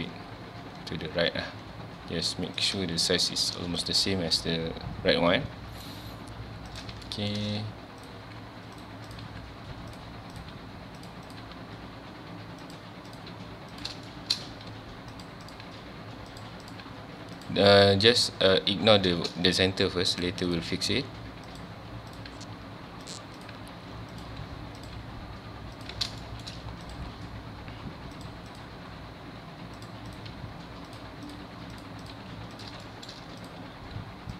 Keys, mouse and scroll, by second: 2.7 click, 3.8 click, 4.4 g, 6.8 click, 7.1 shift+middle click, 8.0 click, 8.1 g, 9.1 click, 9.2 g, 10.3 click, 10.5 g, 11.3 click, 11.4 g, 13.1 click, 13.3 g, 13.8 click, 14.1 shift+middle click, 14.7 g, 15.5 click, 15.6 g, 16.7 click, 16.8 g, 17.5 click, 19.5 click, 19.7 g, 20.5 click, 20.6 g, 21.6 click, 22.1 click, 22.3 g, 23.4 click, 23.5 g, 24.2 click, 24.8 click, 25.0 g, 25.9 click, 26.2 shift+middle click, 26.8 click, 27.1 g, 28.5 click, 28.8 g, 30.1 click, 30.3 g, 31.3 click, 31.4 g, 32.0 click, 32.1 g, 32.6 click, 32.8 shift+middle click, 33.4 click, 33.6 g.